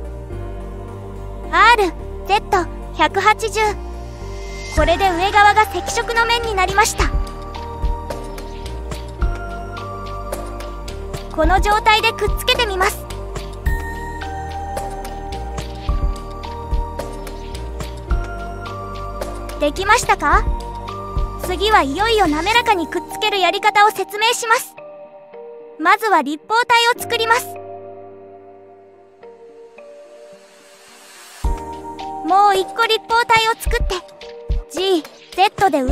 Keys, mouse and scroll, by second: 0.0 click, 1.1 r, 8.2 click, 9.5 click, 10.5-14.7 middle drag, 16.9 shift+click, 17.4-18.6 right drag, 19.9 middle click, 23.5 click, 24.3 click, 28.7 shift+a, 32.6 shift+a, 35.6 g.